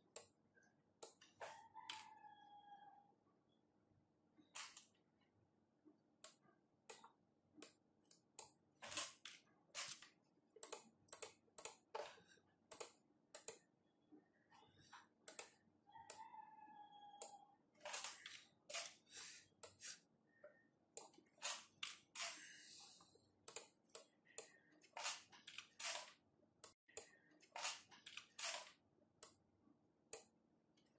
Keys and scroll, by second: 4.0 scroll down 1, 11.3 Right, 20.3 Right, 23.9 Left, 27.6 Left.